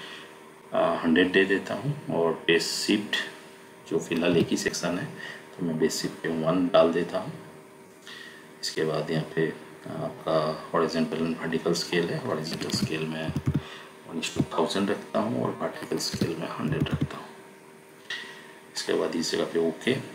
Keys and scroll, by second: 4.1 1, 12.6 1, 13.2 0, 16.0 1, 16.5 0.